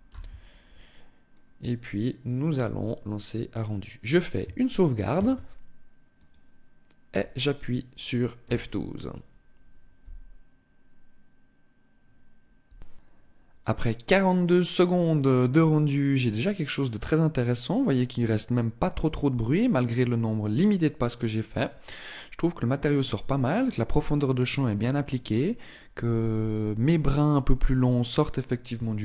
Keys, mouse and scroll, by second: 5.0 ctrl+s.